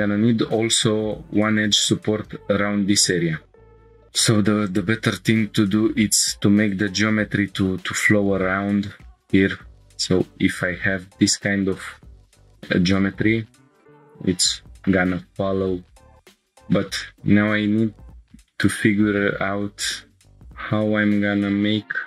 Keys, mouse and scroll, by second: 3.1 right click, 3.8 shift+middle click, 3.8 scroll up 3, 3.9 k, 9.5 scroll down 1, 11.9 scroll up 2, 12.7 scroll up 1, 12.7 scroll down 1, 18.6-19.9 drag, 19.9 g, 20.1 g.